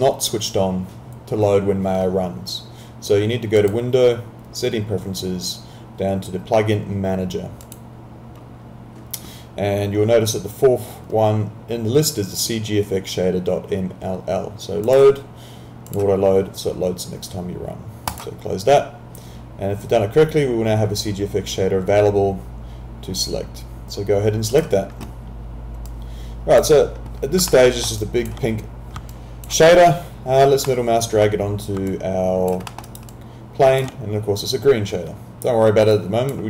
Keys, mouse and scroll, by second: 3.6 click, 7.7 click, 14.9 click, 24.5 click, 27.5 alt+middle click, 28.0 alt+click, 29.1 alt+click, 30.7 middle click, 31.9 alt+click, 32.7 alt+middle click, 32.9 alt+right click, 33.1 alt+click, 35.9 click.